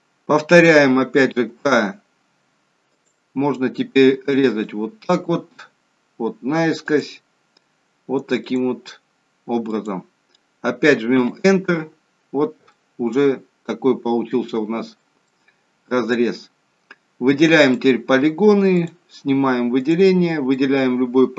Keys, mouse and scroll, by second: 1.4 k, 12.6 middle click, 15.2 middle click, 17.6 click, 18.7 click, 19.7 click, 20.4 middle click.